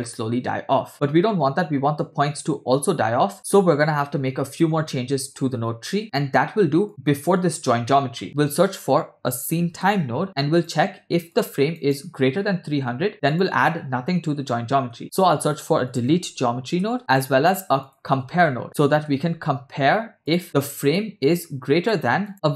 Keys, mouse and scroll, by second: 2.9 space, 4.4-4.7 scroll down 2, 4.9-5.9 middle drag, 6.9-7.4 drag, 7.9 middle click, 8.2 shift+a, 11.4-11.8 drag, 13.4 click, 15.0 shift+a, 18.2 shift+a, 20.4-20.7 scroll up 2, 21.0-22.1 drag, 22.3 click.